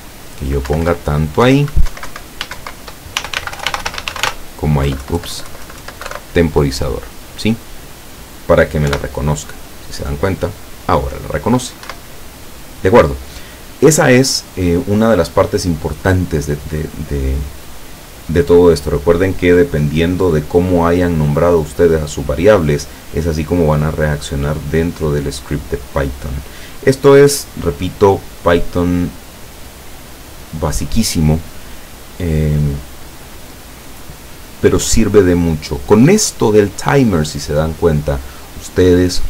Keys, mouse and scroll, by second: 0.7 Down, 1.7 ctrl+Down, 1.9 ctrl+Right, 2.4 ctrl+shift+Right, 3.2-4.2 typing, 6.1 Delete, 8.9 p, 12.0 Escape, 25.3-25.8 scroll up 2, 25.9-26.5 scroll down 2, 26.5-26.8 scroll up 2, 32.4-33.0 scroll down 4.